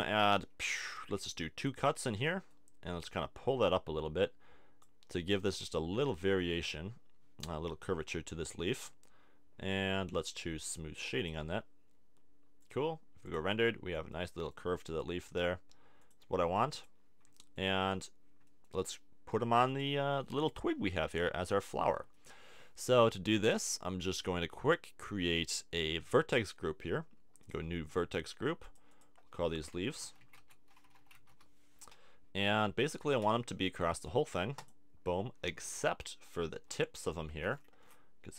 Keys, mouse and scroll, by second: 0.8 ctrl+r, 1.8 click, 2.1 middle click, 3.0-4.9 drag, 9.8 Tab, 11.1 click, 17.3 click, 17.9-19.3 middle drag, 19.3-20.7 right drag, 20.7 click, 20.9 KP_1, 21.4 KP_3, 27.4-30.9 drag, 32.9 Tab, 33.2 a, 34.6-35.7 drag, 36.6 a, 37.3 c.